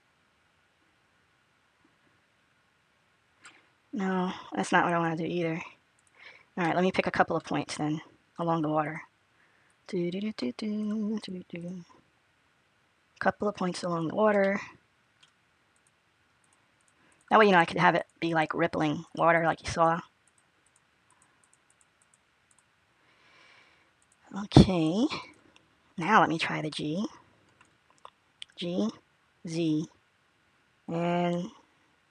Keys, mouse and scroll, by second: 6.5 middle click, 8.2 click, 8.7 click, 9.5 click, 11.4 click, 14.7 middle click, 15.1-15.6 scroll down 1, 15.6 shift+click, 16.3 shift+click, 17.4 shift+click, 21.7 shift+click, 23.2 shift+click, 23.8 shift+click, 25.1 shift+click, 26.6 middle click, 26.6-27.0 scroll up 1, 28.2 g.